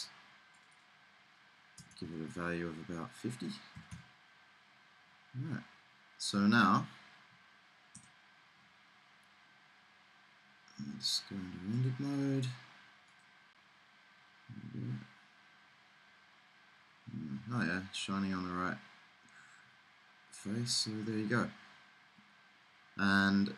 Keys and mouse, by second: 1.9 BackSpace, 2.1 BackSpace, 5.3 middle click, 13.9 middle click, 16.2 middle click, 18.2 middle click, 20.0 middle click, 21.0 middle click, 23.4 middle click.